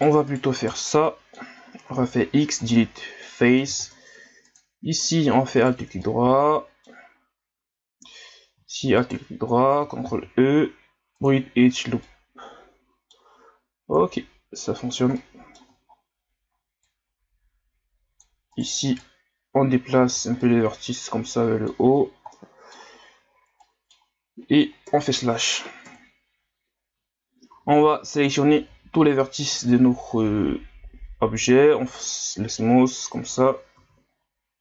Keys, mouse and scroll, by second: 0.3 shift+right drag, 0.6 shift+right click, 1.0 middle click, 1.9 x, 3.2 middle click, 3.8 ctrl+Tab, 5.6 alt+right click, 6.0-9.0 middle drag, 9.0 alt+shift+right click, 10.0 ctrl+e, 12.1-14.0 middle drag, 14.0-15.2 right drag, 15.2 middle click, 15.9 ctrl+scroll down 1, 16.9-18.5 drag, 18.5 right click, 19.0-20.4 drag, 20.4-22.0 middle drag, 22.0 scroll down 2, 22.3-24.9 middle drag, 24.9 KP_Multiply, 25.9 KP_1, 27.5 a, 27.7 a, 28.7 w.